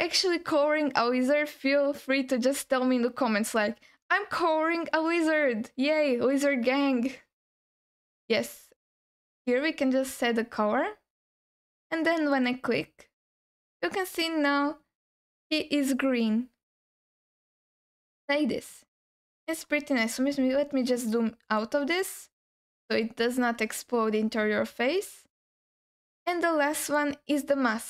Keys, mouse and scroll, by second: 12.3 click, 14.1-15.1 scroll down 1, 15.1 scroll down 2, 15.2-18.7 alt+middle drag, 19.0 scroll up 1, 19.7-20.4 scroll down 3, 21.1 middle click, 22.0 scroll up 1, 26.8 click.